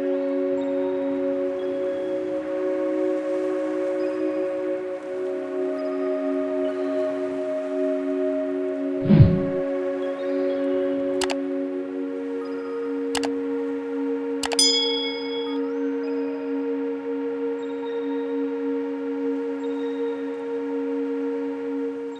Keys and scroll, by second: 19.3 space.